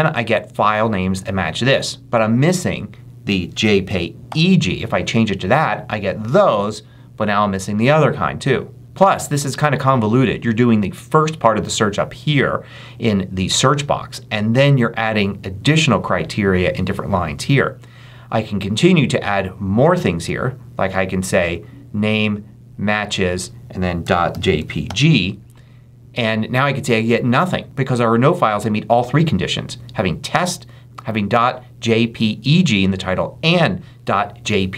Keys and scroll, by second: 3.5 Left, 4.1 e, 23.7-25.3 typing.